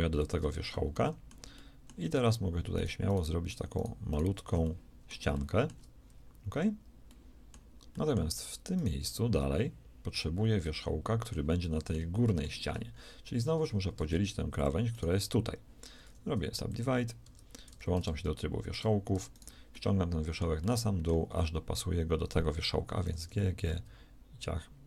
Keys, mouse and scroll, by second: 6.3 f, 8.6-10.1 middle drag, 8.9 g, 13.9 ctrl+Tab, 15.9 w, 17.1 Tab, 17.6 Tab, 22.9 g.